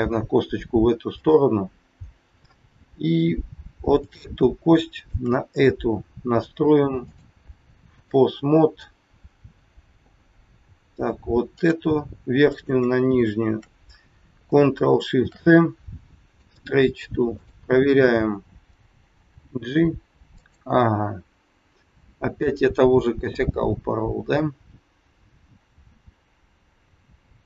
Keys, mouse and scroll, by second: 3.9 click, 4.9 shift+click, 7.1 click, 11.5 click, 12.4 shift+click, 15.0 ctrl+shift+c, 17.3 click, 19.3 g, 22.3 click.